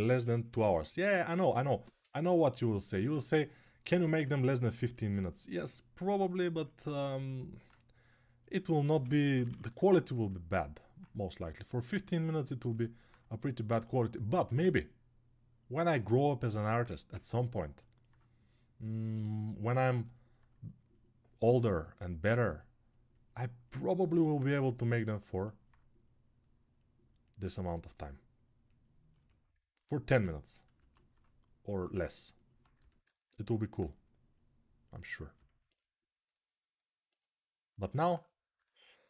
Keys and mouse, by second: 8.7 g, 9.1 ], 9.2 ], 23.1-29.3 right drag, 30.5 alt+q, 33.0 click, 33.5-36.5 right drag, 36.5-39.0 drag.